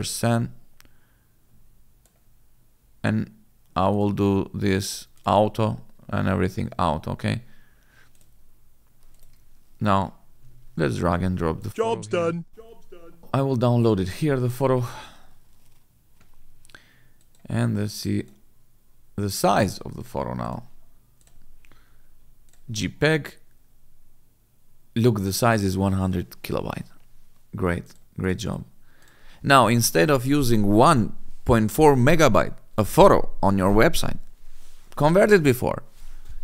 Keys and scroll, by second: 10.5 alt+Tab.